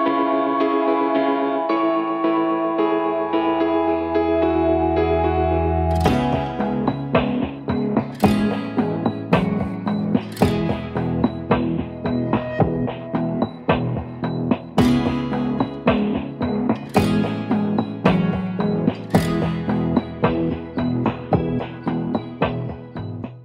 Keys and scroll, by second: 0.3 Return, 0.5 BackSpace, 0.7 BackSpace, 1.3 ctrl+d, 4.5 Return, 6.0-7.5 typing, 7.8 Return, 7.9 Return.